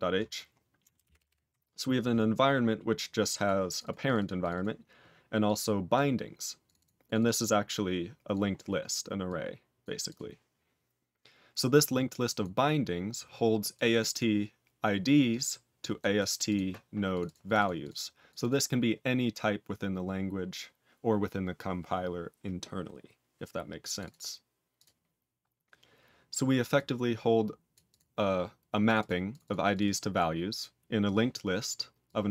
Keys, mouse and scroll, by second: 1.0 ctrl+=, 2.9 click, 3.4 click, 3.6 click, 3.8 double click, 4.0 click, 4.1 double click, 4.3 click, 4.5 double click, 5.4 click, 5.9 click, 6.6 click, 6.8 double click, 7.0 click, 7.1 double click, 7.4 click, 9.2 click, 9.8 click, 10.0 click, 12.2 click, 12.4 click, 13.7 click, 13.9 click, 15.9 click, 16.1 click, 16.4 click, 17.1 click, 17.2 double click, 17.4 click, 17.5 double click, 17.8 click, 18.2 click, 18.3 double click, 23.8 click, 24.0 double click, 24.7 click, 26.7 click, 27.9 click, 28.8 click, 28.9 double click, 29.2 click, 29.4 double click, 29.7 click, 29.8 double click, 30.1 click, 31.0 click, 31.2 click, 32.0 click, 32.2 click.